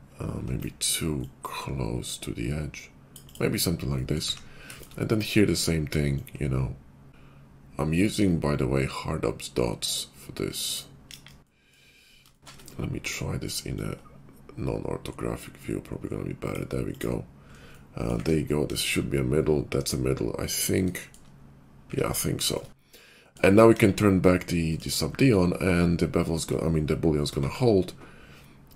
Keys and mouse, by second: 8.2-28.7 drag, 11.0 KP_5, 18.5 KP_5, 23.6 KP_5, 27.4 ctrl+`.